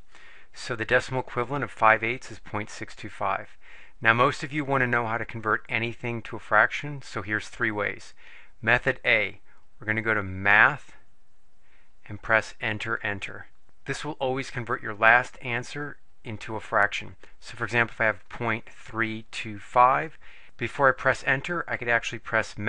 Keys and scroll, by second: 12.7 Return, 13.0 Return, 18.4-20.2 typing.